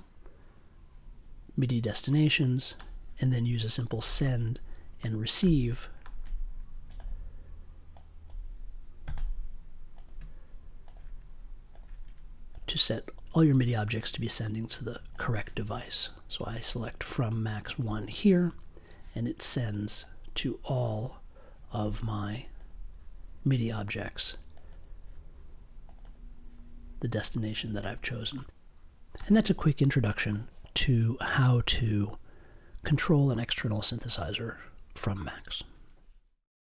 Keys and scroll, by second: 9.0 r.